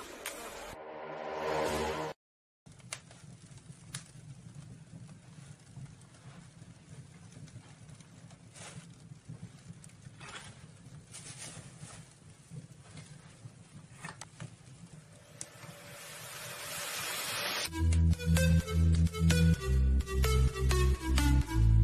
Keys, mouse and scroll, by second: 1.3 scroll up 1, 7.8 middle click, 8.6-9.2 scroll down 1, 9.3-12.2 middle drag, 13.4-17.9 drag, 17.9-18.6 scroll down 1.